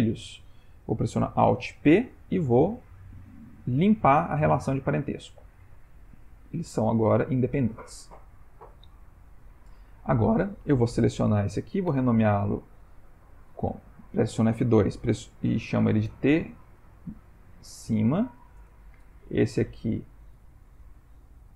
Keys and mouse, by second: 1.9 alt+p, 5.5 g, 9.9 click, 11.9 t, 13.5 F2, 19.9 click, 20.7 F2.